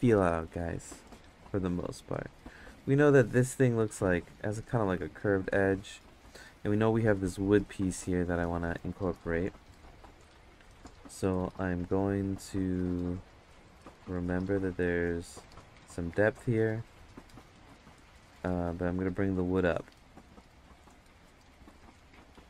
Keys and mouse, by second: 4.1 click, 4.9 ctrl+z, 7.2-8.3 drag, 8.7 ctrl+z, 13.6-15.1 drag, 18.6 click, 20.4 ctrl+z, 21.2-22.4 drag.